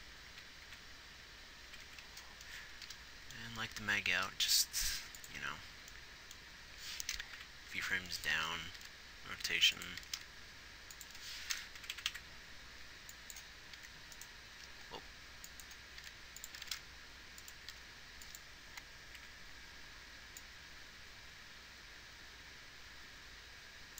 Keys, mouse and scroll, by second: 0.3 Left, 0.7 Right, 1.0 Right, 2.1 Right, 2.2 Right, 4.6 g, 7.7 Right, 8.2 Right, 9.2 r, 10.4 r, 12.2-12.5 Right, 14.1 r.